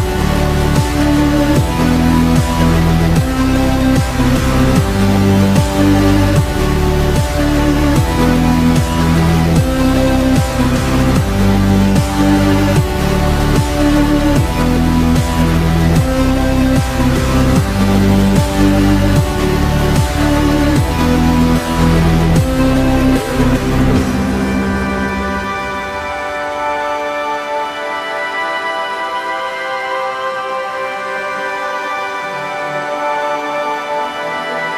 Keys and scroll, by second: 1.2 z, 1.6 z, 4.3 z, 11.5 v, 15.6 g, 17.7 s, 19.2 p, 24.1 Left, 24.3 p, 26.4 ctrl+s.